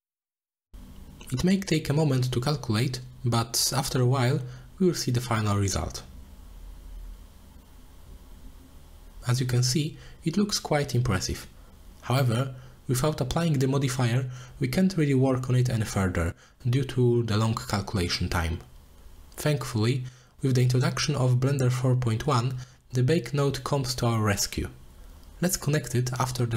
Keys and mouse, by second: 0.1 click, 0.4-3.2 middle drag, 3.2-7.9 drag, 10.1 middle drag, 11.0-12.5 middle drag, 12.5 click, 12.9-14.6 middle drag, 15.2 middle drag, 18.7 click, 22.0 click, 22.1 middle click, 22.3 middle drag, 24.3 click, 24.8 click, 25.3 click, 25.8 shift+a.